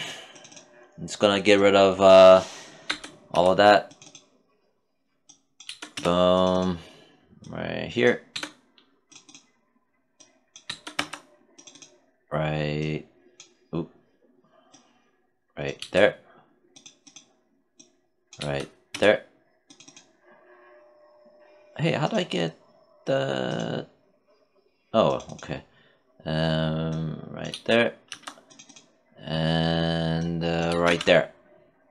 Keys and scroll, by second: 2.2 BackSpace, 2.7 Return, 5.0 BackSpace, 5.3 Return, 7.7 BackSpace, 10.1 BackSpace, 10.3 Return, 15.2 BackSpace, 17.7 BackSpace, 18.3 Return, 26.9 BackSpace, 27.5 Return, 30.0 BackSpace, 30.2 Return.